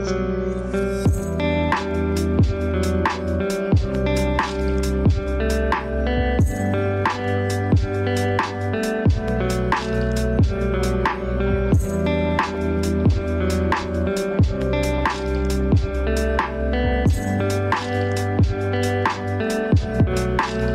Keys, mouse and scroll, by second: 0.1-0.5 scroll up 1, 0.6 click, 1.5 space, 1.6 click, 1.8 space, 2.0 click, 3.0 scroll down 1, 3.1 space, 3.3 scroll up 1, 3.5 space, 3.9 scroll up 1, 4.1 alt+right click, 4.3 click, 4.5-5.1 scroll down 2, 4.7 click, 5.1 space, 5.4 click, 5.4 space, 5.7 click, 5.8 scroll up 1, 6.0 click, 6.4-7.8 scroll down 2, 6.5 typing, 6.6 ctrl+z, 8.0 click, 12.0 ctrl+z, 15.5 shift+F6, 16.9 click.